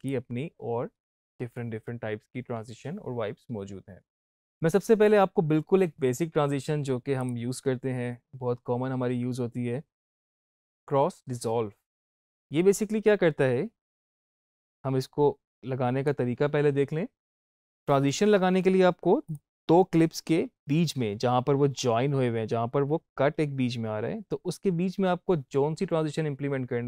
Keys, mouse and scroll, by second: 0.8-3.1 scroll down 1, 4.1 click, 7.1 click, 9.2 click, 14.1-17.3 drag, 19.1 click, 19.4 =.